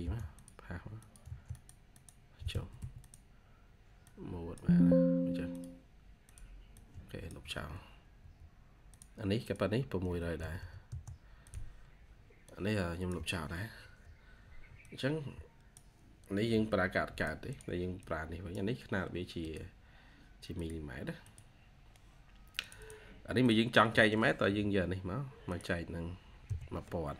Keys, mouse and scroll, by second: 0.0-0.5 typing, 1.8 double click, 2.4 Escape, 2.6 Escape, 6.6 double click, 9.7-10.9 typing, 13.7 Delete, 16.4 Delete, 17.4 double click, 22.6 double click, 24.3 typing, 26.9-27.1 typing.